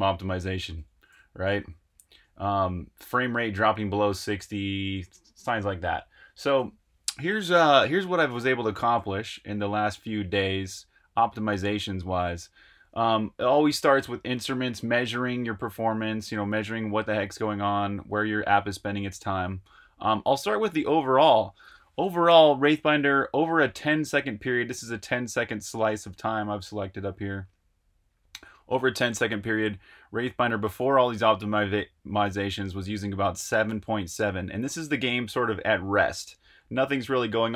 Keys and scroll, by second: 0.0-2.6 typing, 8.7 j, 9.2 super+q, 10.2 super+Tab.